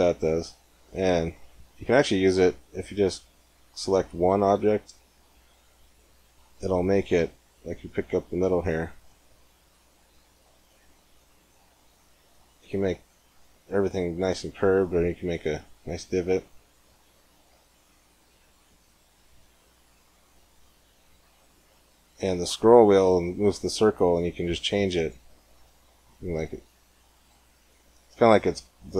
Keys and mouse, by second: 0.8 ctrl+z, 3.8-4.9 drag, 4.4 g, 7.0-8.8 drag, 7.8 g, 8.8 middle click, 17.5-19.3 drag, 19.3 g.